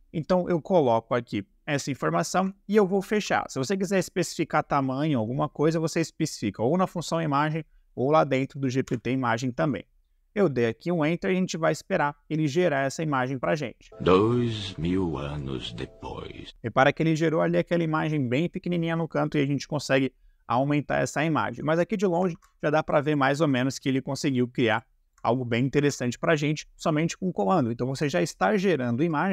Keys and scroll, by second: 3.0 shift+0, 8.8 Return, 17.2 Escape, 22.4 ctrl+`, 25.8 Escape.